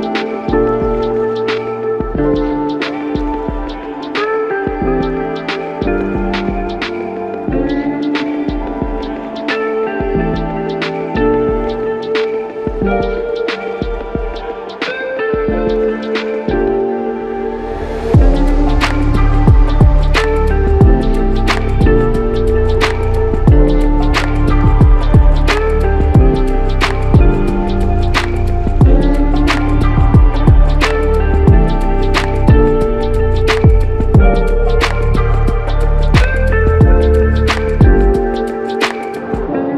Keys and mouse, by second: 0.0 shift+click, 0.2 shift+double click, 1.9 f, 2.7 double click, 5.7 shift+click, 7.1 alt+click, 12.9 alt+click, 15.7 ctrl+z, 17.7 double click, 22.4 alt+click, 24.4-25.2 typing, 27.7 double click, 28.4 alt+click, 29.8 typing, 31.3 typing, 34.1 double click.